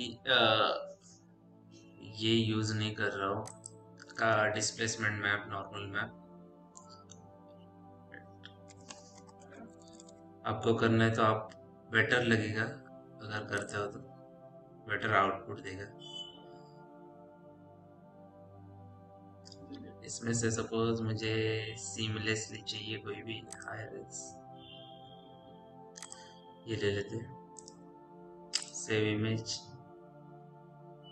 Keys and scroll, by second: 0.0-0.1 typing, 4.5 space, 8.5-10.2 typing.